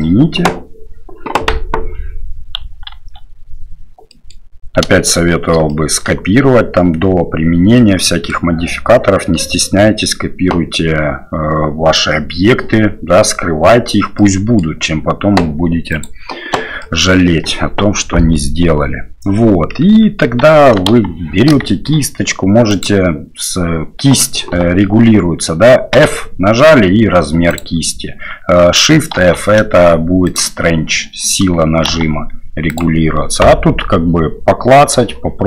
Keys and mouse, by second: 0.0 ctrl+z, 0.0 click, 3.2 ctrl+a, 4.1 click, 5.6 shift+drag, 7.7-8.3 drag, 14.2 click.